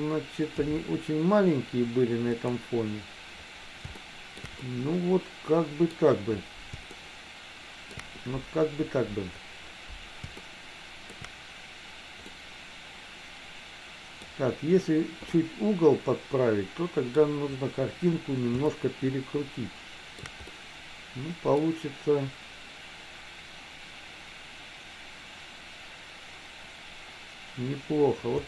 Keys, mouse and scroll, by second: 0.6 s, 4.1 shift+middle click, 4.6-6.0 middle drag, 7.1 scroll up 1, 7.3 shift+middle click, 10.7 shift+middle click, 12.4 scroll up 1, 12.5-14.4 middle drag, 15.4-17.2 middle drag, 18.8-20.4 shift+middle drag, 20.5-21.7 middle drag.